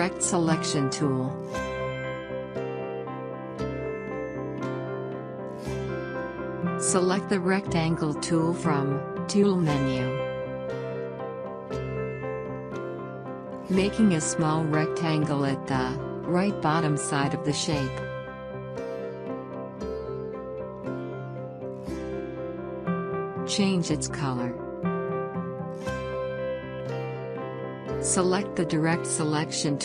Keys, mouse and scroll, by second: 1.2 alt+scroll up 2, 2.3-6.8 drag, 7.7 alt+scroll up 1, 8.5 click, 12.3-14.8 drag, 14.8 scroll down 1, 23.5 click.